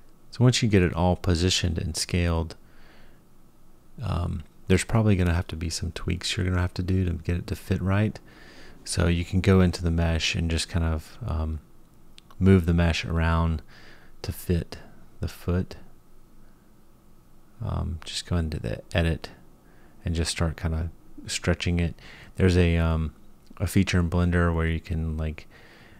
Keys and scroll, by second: 2.2 s, 3.2 r, 5.0-10.0 typing, 11.8 g, 13.4 s, 15.2 r, 16.6 s, 17.7 g, 19.7 s, 20.9 s, 25.0 Tab.